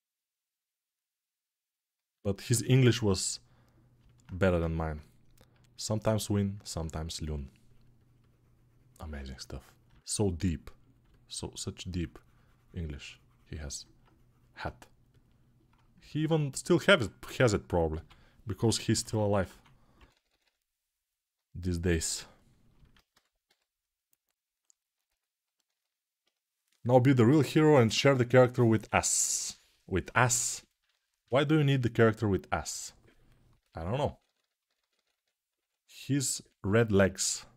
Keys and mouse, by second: 3.3 ctrl+r, 17.7 g, 19.2 3, 23.2 g, 28.7-37.5 ctrl+alt+drag.